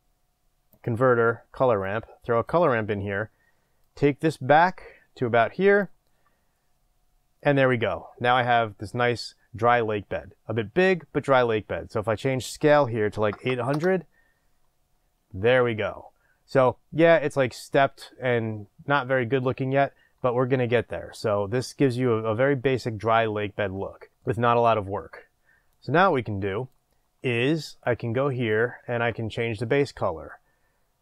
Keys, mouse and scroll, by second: 3.8-31.0 drag, 13.7 KP_0, 13.8 Return.